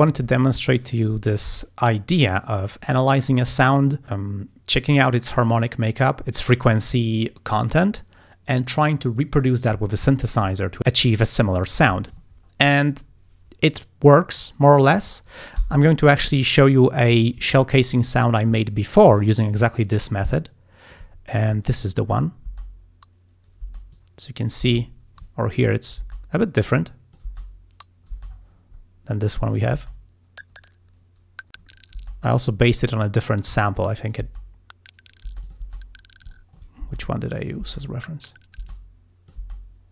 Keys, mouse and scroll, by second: 12.4 ctrl+scroll down 2, 13.5 scroll up 2, 14.1 scroll down 2, 15.6 g, 16.0-16.3 scroll up 1, 16.5 ctrl+scroll down 1, 19.3 ctrl+scroll down 2, 20.2-21.2 drag, 21.2 ctrl+scroll up 2, 21.8 ctrl+click, 22.5 space, 23.7 space, 24.0 click, 24.7 space, 25.5 ctrl+scroll down 2, 26.1 ctrl+space, 26.7 click, 27.3 space, 28.2 space, 28.4 scroll down 1, 28.8 scroll up 1, 29.6 click, 29.8 space, 32.0 space, 32.9 scroll up 2, 33.8 click, 34.3 space, 35.3 space, 35.4 click, 36.4 ctrl+scroll down 2, 36.8 ctrl+space, 37.4 ctrl+click, 37.6 space, 38.7 space, 38.7 click, 39.4 space.